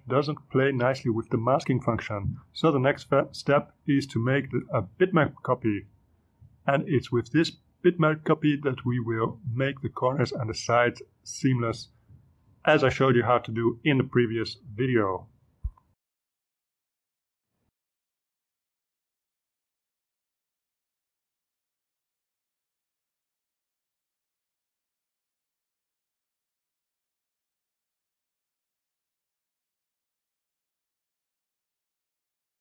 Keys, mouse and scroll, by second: 1.6 click, 3.2 click, 6.9 click, 8.8 click, 12.1-14.3 drag, 14.8 click, 15.5 ctrl+r, 15.6 click, 15.7 ctrl+x, 15.8 ctrl+v, 15.9 click, 16.1 ctrl+x, 16.2 click, 16.2 ctrl+v, 16.3 click, 16.4 Delete, 16.5 click, 16.7 click, 16.8 click, 17.1 click, 17.3 ctrl+x, 17.6 ctrl+v, 17.6 click, 17.9 click, 18.0 click, 18.5 click, 18.6 ctrl+u, 18.7 click, 18.8 ctrl+u, 18.8 ctrl+click, 19.0 Delete, 19.1 click, 19.4 click, 19.6 click, 19.9 click, 20.1 click, 20.2 click, 20.3 ctrl+z, 20.4 click, 20.5 click, 20.9 shift+click, 21.2 click, 21.6 click, 21.7 ctrl+z, 21.8 click, 22.2 click, 22.6 click, 22.7 click, 22.8 click, 22.9 ctrl+z, 22.9 ctrl+click, 23.2 click, 23.3 click, 23.5 click, 24.1 click, 24.3 click, 24.9 click, 25.1 click, 25.4-29.5 typing, 25.5 click, 26.2 scroll down 2, 26.3 click, 26.4 click, 26.6 scroll up 2, 26.8 click, 27.2 scroll down 2, 27.2 click, 27.4 click, 27.7 click, 28.3 scroll down 2, 28.4 click, 28.6 click, 28.8 click, 29.6 click, 29.8 click, 29.9 click, 30.2 click, 30.6 click, 30.8 click, 31.0 click, 31.5 click, 31.7 click, 32.0-32.6 typing, 32.1 click.